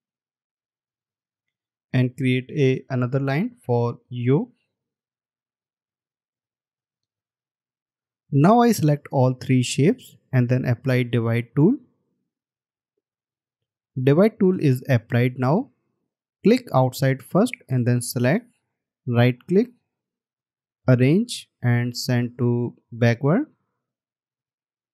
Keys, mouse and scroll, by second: 1.0-1.3 alt+scroll down 1, 1.9 alt+scroll down 1, 19.3 right click.